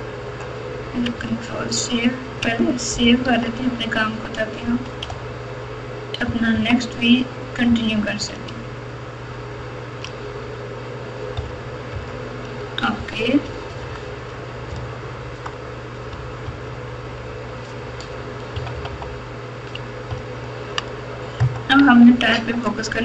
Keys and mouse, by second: 3.2 ctrl+s, 4.6 KP_Subtract, 5.1 KP_Divide, 6.2 KP_6, 6.5 KP_3, 7.6 KP_Subtract, 8.1 KP_Subtract, 9.2 ctrl+KP_6, 9.7 ctrl+KP_6, 11.3 KP_Subtract, 11.9 KP_Subtract, 13.4 KP_4, 13.6 KP_4, 13.8 KP_4, 14.7-15.4 KP_Add, 16.4-17.2 ctrl+KP_4, 18.5 KP_Subtract, 18.7 KP_Subtract, 18.9 KP_Subtract, 20.1 ctrl+KP_4, 20.5 ctrl+KP_4, 20.7 ctrl+KP_4, 21.3 KP_Add.